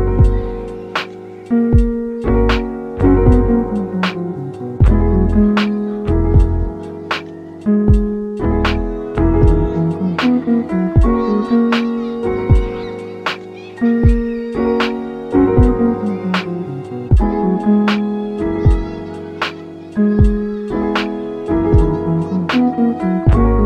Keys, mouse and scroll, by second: 1.0 scroll down 2, 1.1-1.7 middle drag, 1.7 scroll up 2, 1.9-4.0 middle drag, 4.0-5.1 scroll up 4, 5.1 alt+click, 5.9 alt+click, 6.6 middle click, 7.1 s, 7.9 click, 8.5 alt+click, 8.8 alt+s, 9.8 alt+click, 9.9 alt+s, 10.5 right click, 11.0 s, 12.3 click, 12.6 scroll down 2, 12.8-13.6 middle drag, 13.5 s, 13.9 click, 14.2 scroll down 3, 14.4-14.8 middle drag, 14.8 alt+z, 15.3 alt+z, 15.8 Tab, 16.0 click, 16.3 scroll down 2, 16.4-17.9 middle drag, 17.9 scroll up 1, 18.2 middle click, 18.9 click, 19.3 scroll up 2, 19.5 middle click, 19.8 Tab, 20.1 middle click, 20.5 alt+z, 20.9 1, 21.1-21.7 middle drag, 21.7 click, 22.9 g.